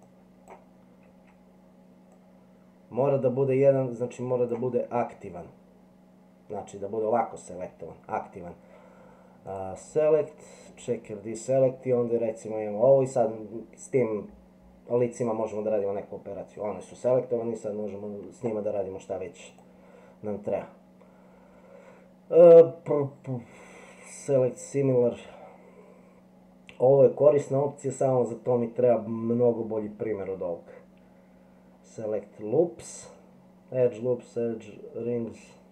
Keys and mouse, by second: 0.1 click, 2.2-4.5 drag, 9.6-10.9 drag, 19.5-35.7 middle drag.